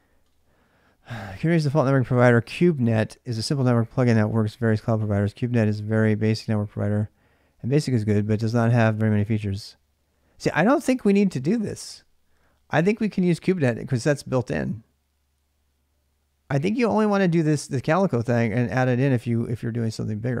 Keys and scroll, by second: 20.3 alt+Tab.